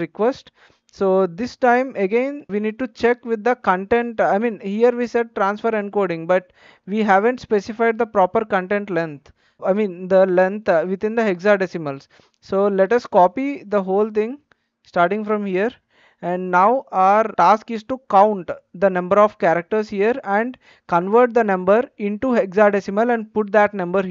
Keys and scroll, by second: 16.4 ctrl+c.